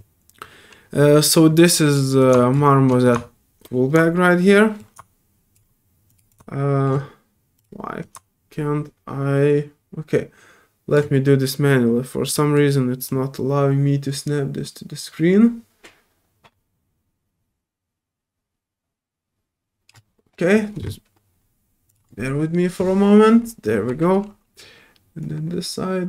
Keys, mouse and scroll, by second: 2.2-2.5 drag, 3.0-4.8 shift+drag, 6.1 shift+click, 6.3-6.8 shift+drag, 7.6 shift+click, 8.0-10.9 shift+drag, 12.3 click, 13.0-19.9 drag, 21.9 click, 25.2-26.0 drag.